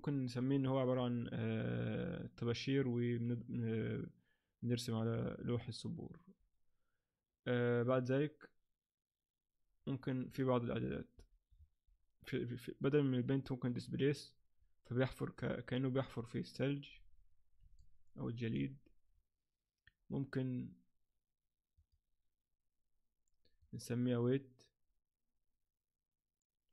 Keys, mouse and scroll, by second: 10.3 right click, 11.5-12.0 scroll down 5, 12.8 click, 12.8 scroll down 2, 17.8 middle click, 21.7 click.